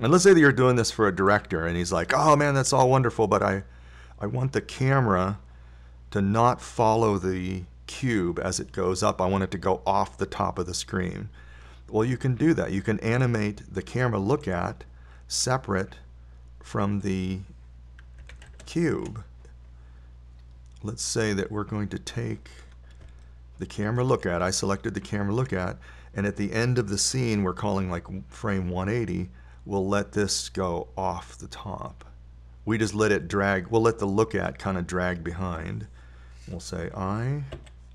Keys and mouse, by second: 9.4-20.4 drag, 24.0-24.7 drag, 24.7-26.8 middle drag, 30.5-32.7 drag.